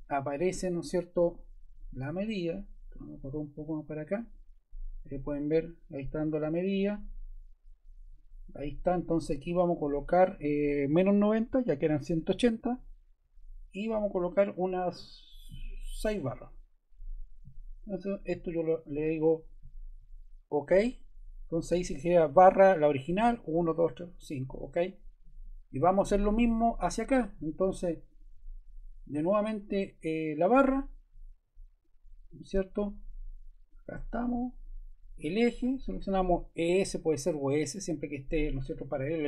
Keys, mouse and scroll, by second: 11.7-12.6 typing.